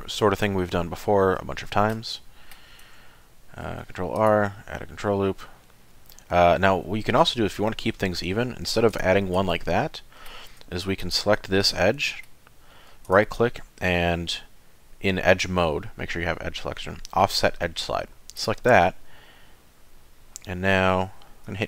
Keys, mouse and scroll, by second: 1.5 shift+middle click, 2.1 middle click, 3.7 ctrl+r, 9.4 ctrl+z, 9.8 middle click, 11.0 alt+click, 11.6 middle click, 13.1 right click.